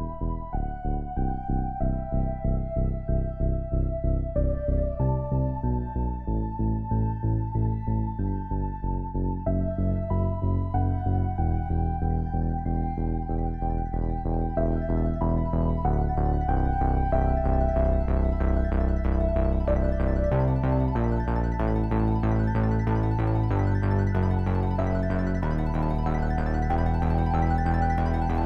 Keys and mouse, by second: 4.4-5.1 middle drag, 6.3 middle click, 6.5-7.1 middle drag, 12.0 middle click, 12.2-13.9 middle drag, 13.9 s, 23.0-23.4 middle drag, 25.0-25.5 right drag.